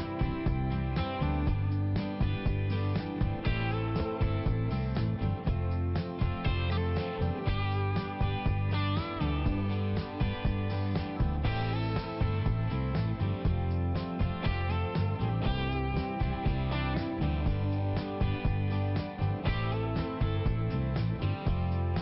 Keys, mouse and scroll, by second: 2.2 click, 4.0 middle click, 11.2 click, 12.5 click, 13.7 click, 16.5 click, 17.9 click, 19.0 click, 19.7 click, 21.0 click.